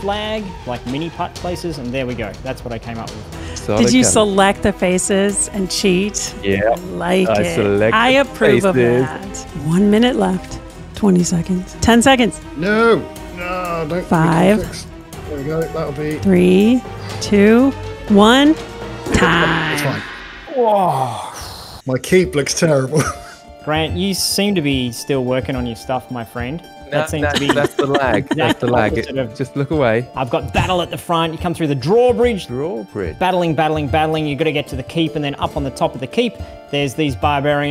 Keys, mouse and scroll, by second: 3.3-4.4 middle drag, 4.4 g, 5.0-6.2 middle drag, 6.2 g, 7.3-8.7 middle drag, 8.7 g.